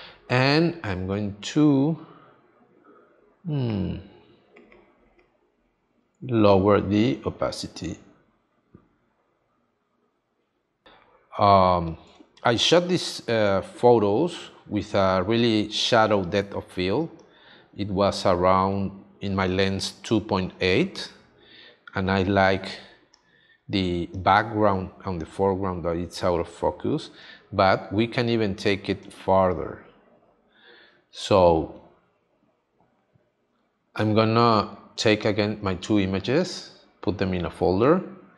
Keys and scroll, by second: 6.2 f, 10.8 space, 12.0 space, 19.6 space, 29.0 space, 36.4 Escape.